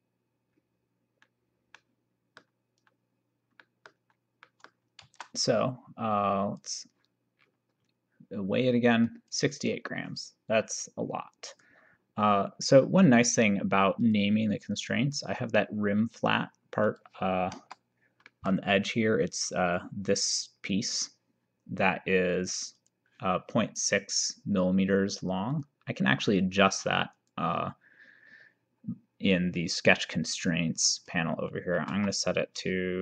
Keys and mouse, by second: 1.8 middle click, 3.6 middle click, 5.1 ctrl+s, 6.6 click, 9.2 click, 11.5 click, 14.0 click, 17.0 click, 17.6 KP_0, 18.3 middle click, 19.7 click, 20.8 click, 22.8 click, 25.5 click, 31.8 BackSpace, 32.0 4.